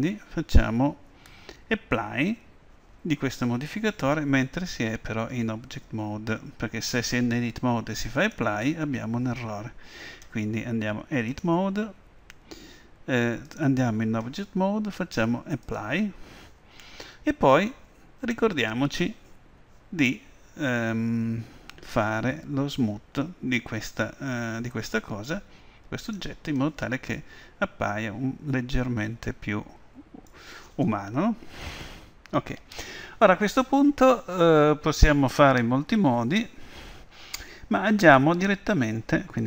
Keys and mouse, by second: 8.2-10.1 drag, 11.3-13.4 drag, 15.7-17.5 drag, 26.0-27.9 drag, 27.2-29.1 middle drag, 32.0 KP_1.